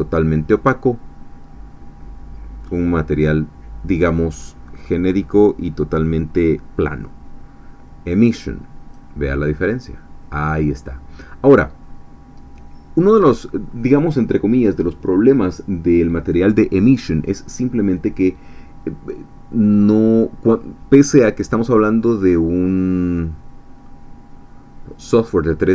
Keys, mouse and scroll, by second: 4.1-9.1 drag, 10.5-13.2 middle drag, 22.2-22.6 scroll down 1, 22.6-25.7 middle drag.